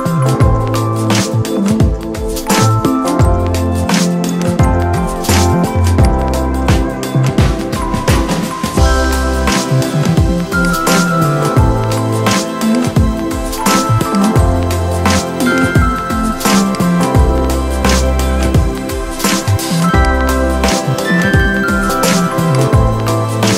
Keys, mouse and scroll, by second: 5.7 shift+Num_Lock, 5.8-16.5 shift+drag, 16.5-23.5 drag.